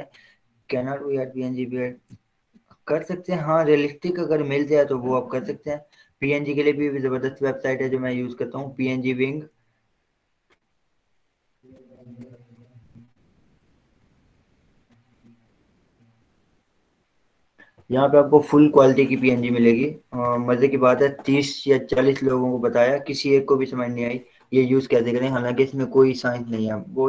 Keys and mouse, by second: 7.7 click, 8.7 click, 20.6 click.